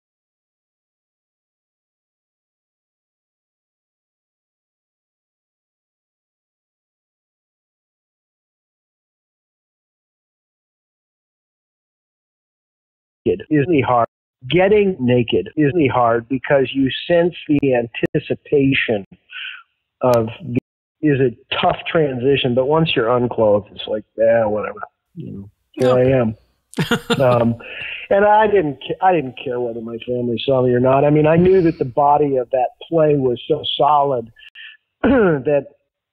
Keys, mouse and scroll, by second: 0.3 click, 0.9 click, 1.7-2.9 drag, 3.8 ctrl+v, 6.6 ctrl+z, 7.8 click, 9.0 ctrl+v, 10.0 click, 10.7 click, 11.3-12.8 drag, 13.1 click, 13.2 space, 13.9 space, 14.2 click, 14.2 space, 17.1 ctrl+z, 17.5 ctrl+z, 17.7 ctrl+z, 18.0 ctrl+z, 18.9 ctrl+z, 20.2 click, 20.5 space, 20.8 click, 20.8 space, 21.8 ctrl+s, 22.6-26.0 drag, 26.5 click, 29.8 click, 30.3 click, 31.4-34.1 drag, 34.4 Delete, 35.5 click.